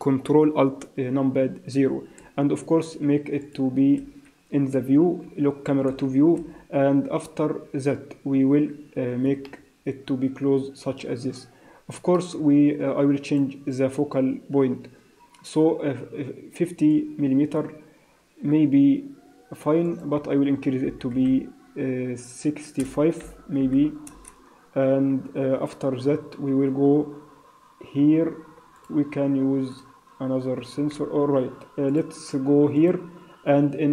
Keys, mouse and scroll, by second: 2.1 n, 3.4 click, 3.9 n, 4.7 n, 5.8 n, 6.3 n, 9.3 ctrl+middle click, 13.2 click, 16.8 click, 19.8 click, 28.7 click, 29.7 click, 31.8 click, 32.7 click.